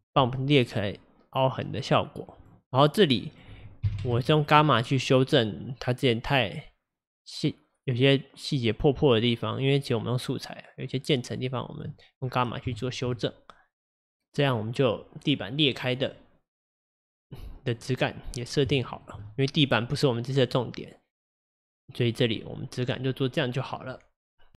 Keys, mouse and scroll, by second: 1.0-4.9 drag, 4.9-6.7 middle drag, 6.7-9.9 drag, 12.3-12.8 scroll down 5, 12.8-14.5 shift+middle drag, 14.5-16.2 scroll down 3, 16.2-18.2 middle drag, 18.2-18.8 scroll up 3, 18.8-24.6 shift+middle drag.